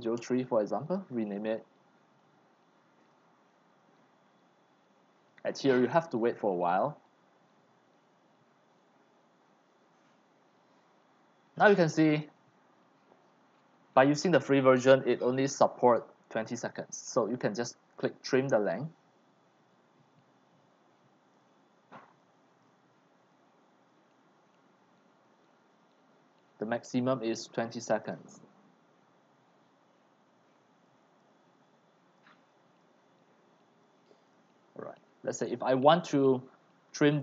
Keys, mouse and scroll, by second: 0.0-0.8 typing, 1.5 click, 1.6 middle click, 1.6-2.0 scroll down 1, 2.0-8.2 drag, 16.1-17.8 drag, 18.5 click, 20.3-34.3 drag, 34.3-35.5 right drag, 35.5-37.2 drag.